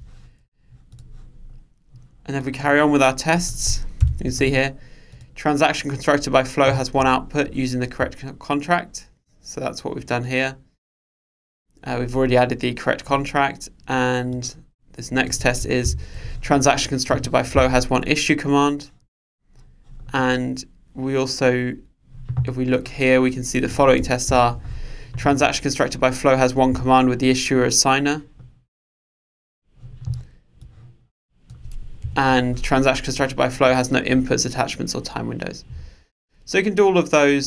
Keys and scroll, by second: 4.0 super+/, 16.2 super+/, 24.3 super+/, 32.1 super+/.